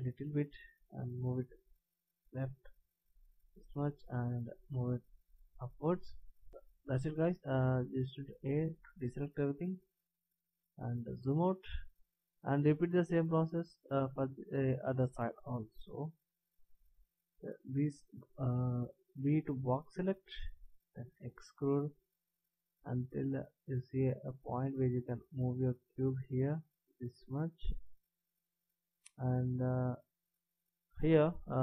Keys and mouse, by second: 1.2 click, 4.2 click, 8.4 a, 9.4 middle click, 11.7-13.8 middle drag, 17.5 b, 21.0 e, 25.5 click.